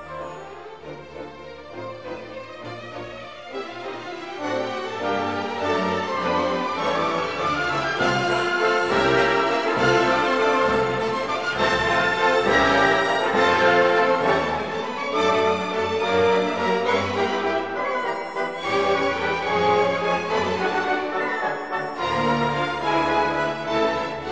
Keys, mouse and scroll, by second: 0.2 shift+z, 0.5 middle click, 0.8 r, 2.4 click, 3.1 middle click, 3.8 shift+z, 4.0 shift+middle click, 4.4 shift+middle click, 4.7 middle drag, 5.1 middle click, 5.5 shift+middle click, 5.6-6.0 middle drag, 6.2-7.4 middle drag, 7.5 shift+middle click, 7.7 middle click, 7.9 shift+middle click, 8.1 middle click, 8.3 middle click, 8.6 shift+middle click, 8.9 KP_1, 9.4 middle drag, 9.8 shift+middle click, 10.2-10.5 middle drag, 10.8 shift+middle drag, 11.4 middle click, 11.6 a, 11.9 shift+middle click, 15.5 Tab, 15.7 shift+middle click, 16.0 shift+middle click, 16.2 Tab, 16.5 shift+middle click, 16.7 shift+z, 16.8 shift+middle click, 17.0 1, 17.1 click, 17.7 shift+z, 17.7 middle click, 17.9 g, 19.4-20.2 middle drag, 20.3 shift+middle click, 20.5 middle drag, 20.8-22.3 drag, 22.4 shift+middle click, 22.6 middle click, 23.8 shift+middle click.